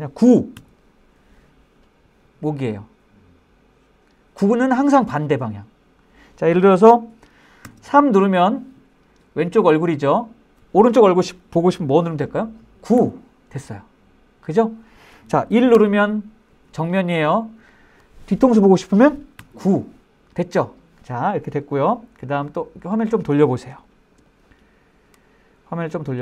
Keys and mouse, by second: 0.8 KP_9, 7.7 KP_3, 13.1 KP_9, 15.9 KP_1, 19.5 KP_9, 22.6-23.6 middle drag, 23.9-24.2 shift+middle drag, 24.4-26.1 middle drag.